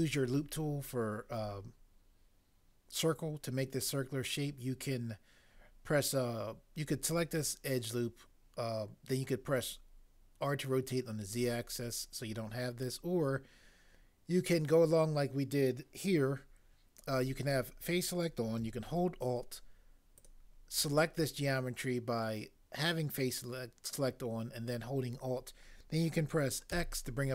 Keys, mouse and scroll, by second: 26.7 x.